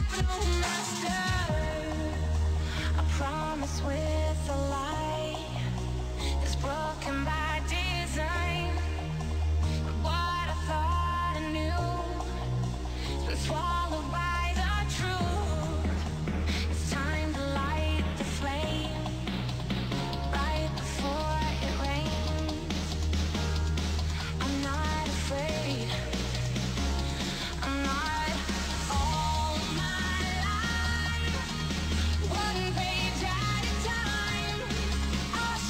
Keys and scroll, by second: 0.5 ctrl+s, 3.9 ctrl+d, 17.4 space, 31.7 1, 34.4 space.